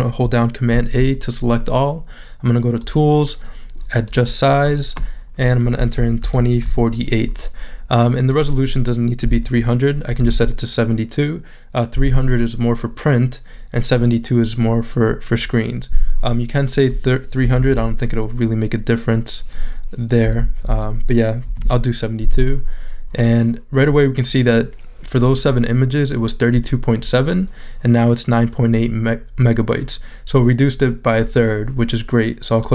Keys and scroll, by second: 0.7 super+a, 5.7-7.1 typing, 9.8-10.8 typing, 17.2-18.1 typing, 20.2-22.1 typing.